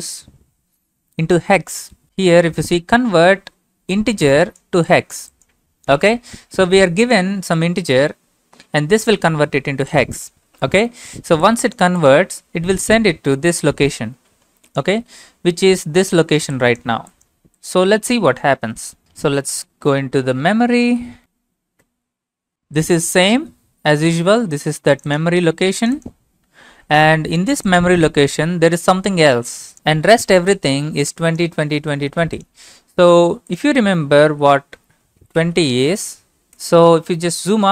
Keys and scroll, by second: 6.1 alt+Tab, 19.1 Up, 19.4 Up, 20.3 Up, 21.2 Up, 21.2 Down, 21.8 Return, 22.2 typing, 34.3-36.1 typing.